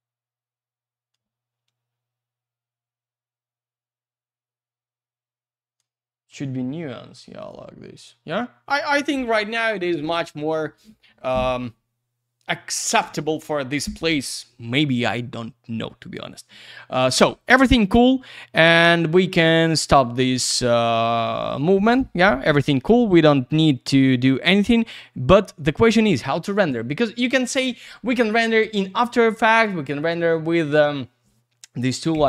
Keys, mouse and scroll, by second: 1.6 click, 7.4 click, 7.4 click, 7.9 click, 8.0 click, 20.5 click, 20.6 click.